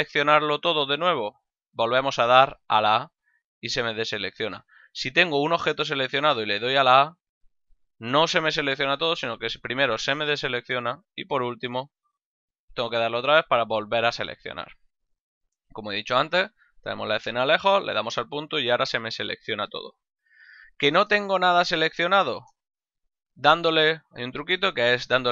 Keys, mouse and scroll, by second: 1.4 a, 4.9 right click, 6.5 a, 11.8 a, 15.6 ctrl+middle click, 16.1 shift+middle click, 17.6 KP_Decimal, 20.3 a, 21.1 shift+middle click, 22.9 shift+c.